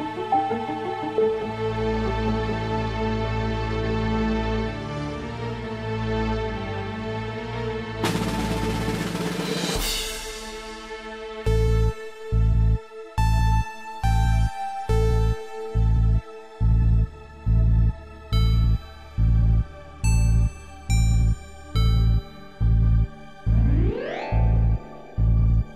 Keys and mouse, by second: 3.1-6.9 drag.